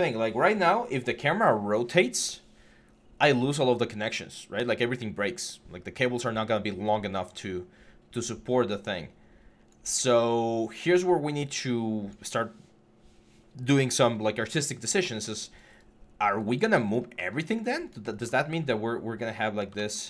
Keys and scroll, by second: 18.2 w, 19.6 ctrl+z.